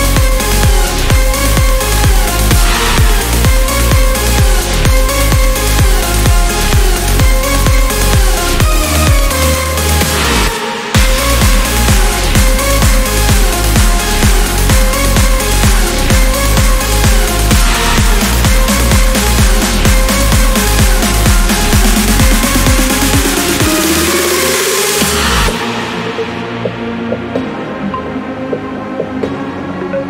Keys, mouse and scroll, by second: 0.2 scroll down 1, 0.8-1.2 scroll up 1, 2.2 click, 4.2-4.6 scroll down 1, 4.8 scroll up 2, 6.4 click, 8.2 ctrl+click, 8.8 ctrl+scroll down 2, 9.7-10.0 ctrl+scroll up 2, 11.4 ctrl+click, 12.2 ctrl+scroll down 1, 12.9 ctrl+scroll up 1, 16.0 ctrl+click, 19.1 click, 20.3 click, 22.0 1, 22.5 0, 23.8 0, 27.1 click, 28.4 click, 29.5 click.